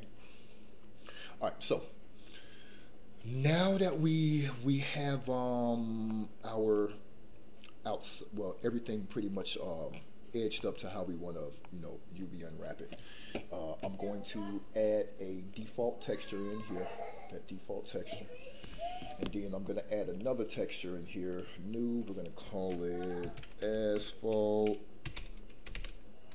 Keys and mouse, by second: 1.3 middle click, 5.2 click, 6.1 middle click, 9.3 middle click, 10.6 middle click, 11.6 middle click, 15.5 click, 16.5 click, 20.1 click, 21.3 click, 21.9 click, 22.2-26.3 drag.